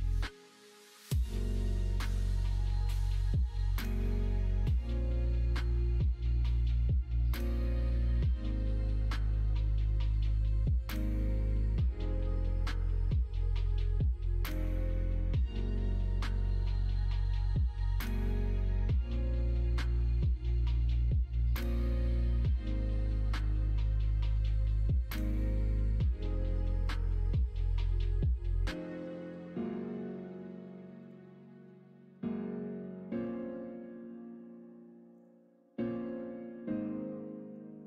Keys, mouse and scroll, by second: 0.4-2.0 middle drag, 3.1 shift+Tab, 3.5 middle click, 4.1 middle click, 4.7 e, 5.6 s, 6.4 ctrl+z, 7.1 middle click, 7.9 i, 10.5 i, 11.9 e, 13.8 middle click, 14.3 middle click, 15.0 middle click, 15.6 click, 16.3 middle click, 16.9 middle click, 18.1 middle click, 18.8 click, 19.1 middle click, 19.6 middle click, 20.7 shift+d, 22.2 shift+Tab, 22.8 g, 25.0 s, 27.6 middle click, 28.8 shift+Tab, 29.2 e, 32.1 ctrl+b, 35.8 middle click, 36.0 click, 36.5 middle click.